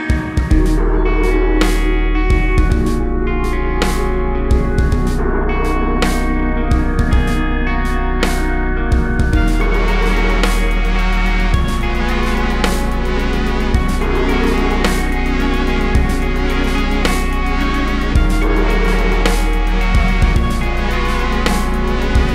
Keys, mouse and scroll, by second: 2.4 alt+click, 3.4 g, 3.9 Tab, 5.0 g, 5.2 click, 5.8 click, 8.0 z, 8.5 click, 9.2 Tab, 10.6 click, 10.9 z, 11.4 click, 12.5 g, 13.3 alt+a, 13.4-13.8 scroll down 1, 13.8 click, 15.1 shift+click, 15.6 ctrl+j, 16.0 Tab, 16.3 click, 16.8 ctrl+l, 17.1 KP_Decimal, 17.2 scroll down 1, 17.4-18.2 scroll up 1, 18.2 shift+d, 20.6 alt+a.